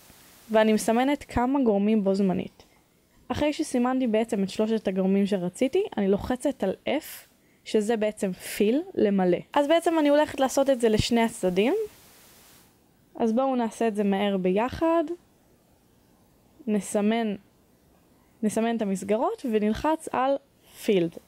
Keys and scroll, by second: 0.1 z, 4.5 f, 12.2 f, 14.5 Caps_Lock, 19.1 a.